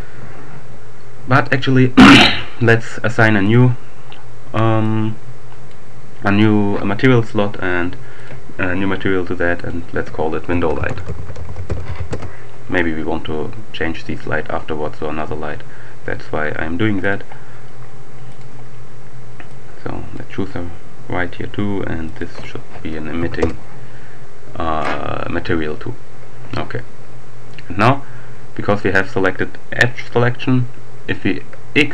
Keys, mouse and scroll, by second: 3.3 click, 4.8-6.0 drag, 8.2 click, 9.6 click, 10.4-11.7 typing, 11.8 shift+Return, 17.0 click, 18.4 click, 19.2-20.6 drag, 21.5-22.0 scroll down 2, 22.1 click, 23.0 1, 23.2 Return.